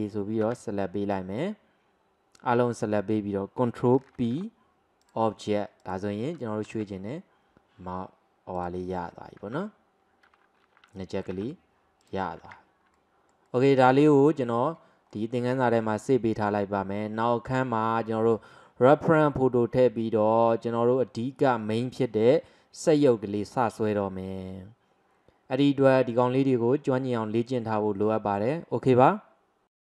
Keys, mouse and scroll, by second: 0.5 a, 4.2 ctrl+p, 5.9 click, 6.8 g, 9.5 ctrl+z, 11.4 g, 12.5 ctrl+z, 13.0-14.1 middle drag, 14.1 scroll up 2, 14.6-15.2 scroll down 1, 15.2-18.2 middle drag.